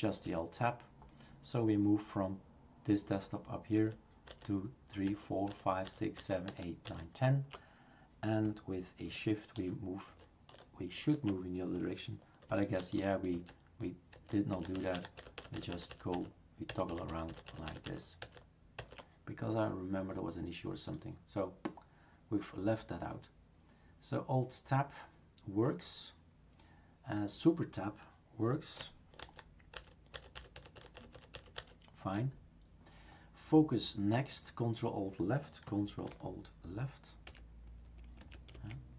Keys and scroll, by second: 0.2 alt+Tab, 3.7 alt+Tab, 6.8 alt+Tab, 9.5 alt+shift+Tab, 10.0 alt+shift+Tab, 12.8 alt+shift+Tab, 13.3 alt+Tab, 14.1 alt+Tab, 14.5 alt+Tab, 14.7 alt+Tab, 14.9 alt+Tab, 15.3 alt+Tab, 15.5 alt+Tab, 15.7 alt+Tab, 15.9 alt+Tab, 16.1 alt+Tab, 16.7 alt+Tab, 16.9 alt+Tab, 17.1 alt+Tab, 17.3 alt+Tab, 17.5 alt+Tab, 17.7 alt+Tab, 17.8 alt+Tab, 18.2 alt+Tab, 18.8 alt+Tab, 29.7 super+Tab, 30.1 super+Tab, 30.3-31.6 super+Tab, 37.3 ctrl+alt+Right.